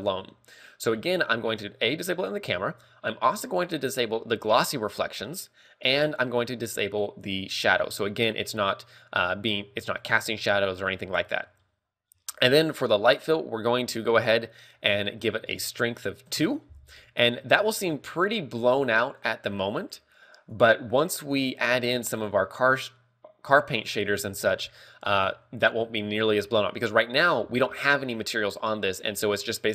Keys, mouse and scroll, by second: 5.1 click, 8.1 click, 12.7 click, 15.8 ctrl+click.